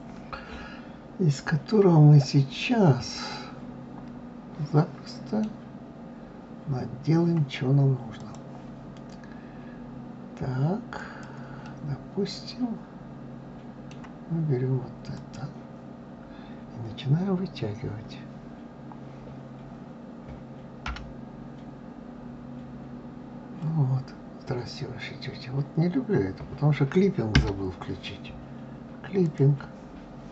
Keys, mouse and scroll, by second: 3.1-6.2 middle drag, 8.0 click, 10.8 click, 11.5-14.4 middle drag, 15.0 click, 29.1 click.